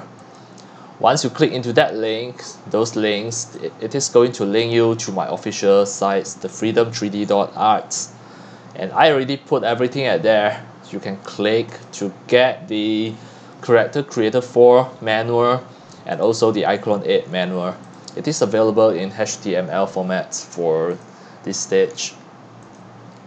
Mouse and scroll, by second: 3.4 click, 4.3 scroll down 1, 4.4-7.1 middle drag, 4.4-5.5 scroll, 7.5-11.8 middle drag, 7.5-10.2 scroll, 11.8-14.7 drag, 14.7-16.2 scroll up 15, 14.9-16.3 middle drag, 16.2-17.9 scroll down 21, 16.3 click, 16.5-17.9 middle drag, 17.9 click, 18.2-21.0 middle drag, 18.2-20.9 scroll up 9, 20.9 scroll up 1, 21.0 click, 21.6-22.7 scroll down 6, 22.7-23.2 scroll down 1.